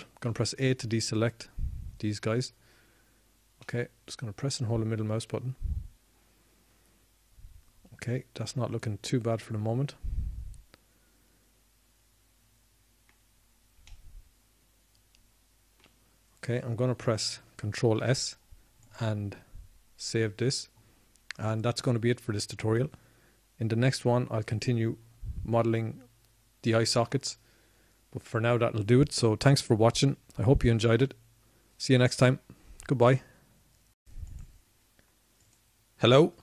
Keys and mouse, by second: 4.2 a, 7.2 middle click, 21.4 ctrl+s.